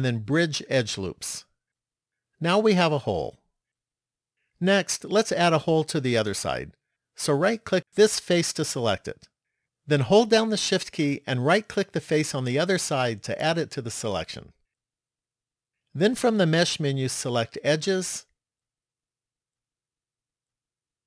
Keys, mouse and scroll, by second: 7.7 right click, 9.5 middle click, 13.4 shift+right click, 16.4 click.